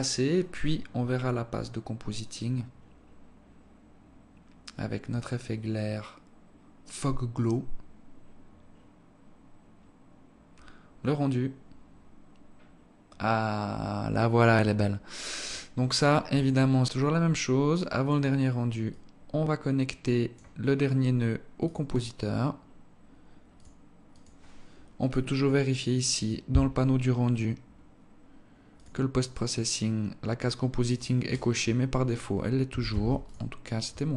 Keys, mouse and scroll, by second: 24.6 click, 26.5 click, 27.3-29.2 scroll down 18, 29.2 click, 29.8-30.4 scroll down 2, 31.3 click, 31.8-32.4 scroll up 12, 32.9-33.2 scroll up 3, 33.4 ctrl+s.